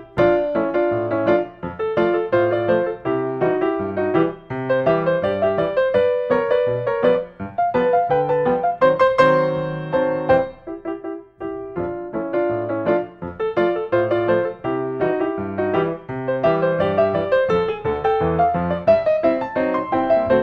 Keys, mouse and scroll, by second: 2.0-3.1 middle drag, 4.6-5.6 middle drag, 5.8-7.0 drag, 7.9-9.0 right drag, 9.1 click, 9.7-10.1 scroll down 5, 10.1 scroll up 2, 10.7 scroll, 11.5 ctrl+s, 12.6 click, 14.0 scroll up 4, 14.8 click, 16.2 click, 16.7-17.5 scroll, 18.1 click, 19.8 click.